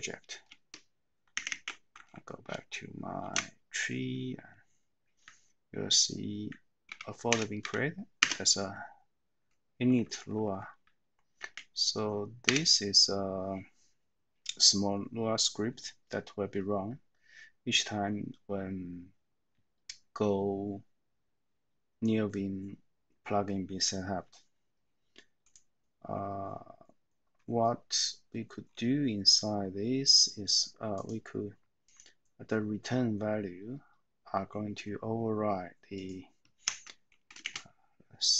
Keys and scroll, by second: 1.5 ctrl+w, 3.2 super+s, 5.8 Up, 5.9-6.4 Up, 6.8 Down, 7.2 Return, 7.6 Down, 9.9 Right, 10.2 Right, 10.4 Right, 11.3 a, 12.4 Return, 36.7 Escape, 37.4 :.